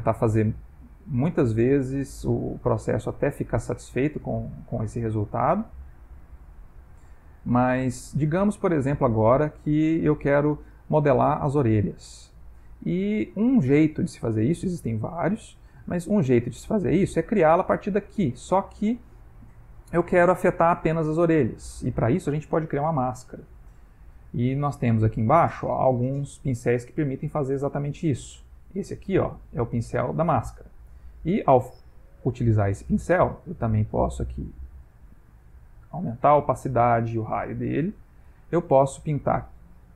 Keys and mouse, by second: 1.4 click, 2.2 click, 2.8 middle click, 3.6 click, 4.6 middle click, 5.6 middle click, 7.2 click, 8.5 middle click, 9.8 middle click, 11.8 middle click, 11.9 middle click, 12.7 middle click, 13.7-14.1 ctrl+middle click, 14.2 middle click, 15.3 ctrl+middle click, 15.9 middle click, 17.8 middle click, 20.6 middle click, 23.6 middle click, 30.8 click, 32.2 middle click, 32.8 ctrl+middle click, 34.3 click, 35.7 shift+middle click, 37.5 f, 39.0 middle click.